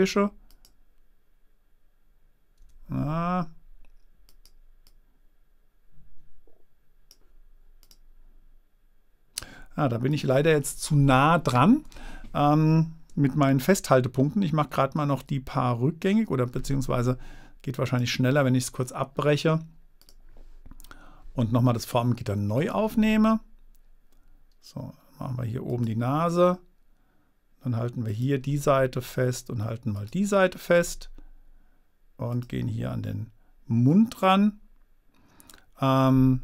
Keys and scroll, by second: 13.9 super+z.